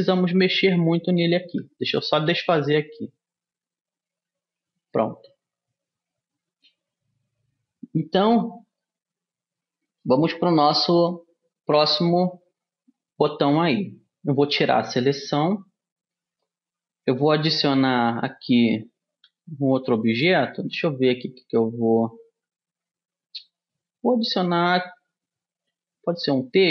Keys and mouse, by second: 1.8 ctrl+z, 2.3 ctrl+z, 2.8 ctrl+z, 4.4 ctrl+z, 5.3-7.6 drag, 9.2-10.8 middle drag, 15.0 a, 15.8-22.5 middle drag, 20.0 shift+a.